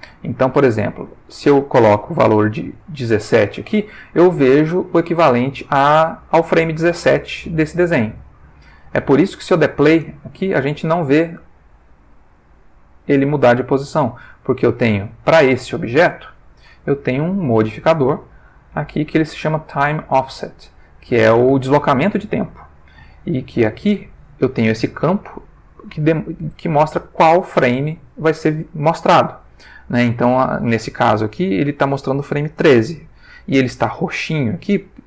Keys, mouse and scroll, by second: 2.2 click, 8.8 click, 9.9 space, 13.3 Escape, 15.5 click, 17.5 click.